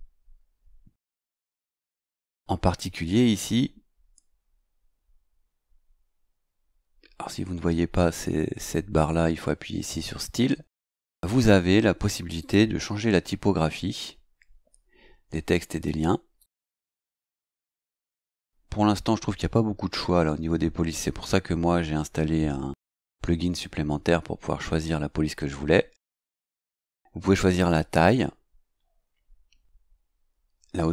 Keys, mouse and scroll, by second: 12.4 click, 16.4 click, 17.8 click, 26.2 click.